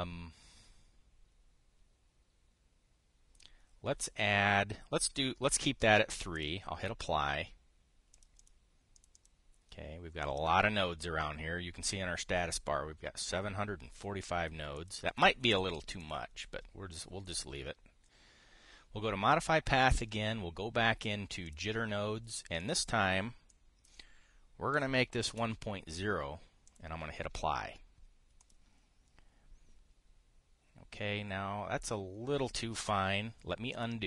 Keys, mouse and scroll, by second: 7.0 click, 8.9 click, 9.1 click, 9.6 click, 15.5 click, 15.8 click, 16.7 click, 18.0 click, 22.2 click, 23.3 click, 24.2 click, 25.4 KP_1, 25.8 KP_Decimal, 26.0 KP_0, 27.4 click, 29.1 click.